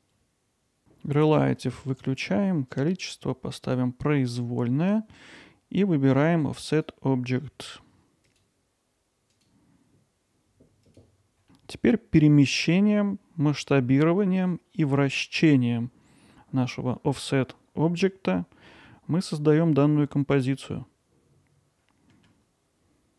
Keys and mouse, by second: 1.6 click, 2.7-4.5 drag, 6.8 click, 8.3 click, 9.3 click.